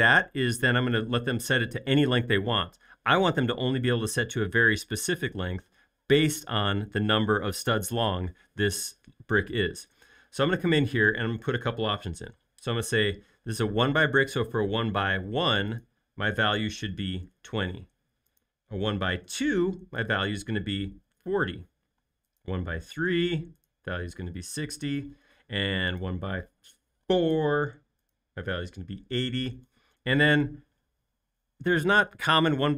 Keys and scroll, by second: 15.4 1, 16.7-17.7 typing, 19.0-21.7 typing, 23.1 typing, 24.3-25.2 typing, 26.8-27.5 typing, 28.8-29.5 typing.